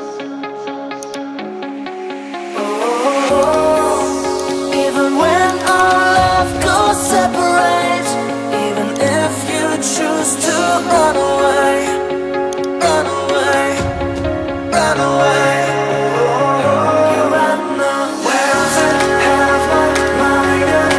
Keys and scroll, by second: 15.9 Return.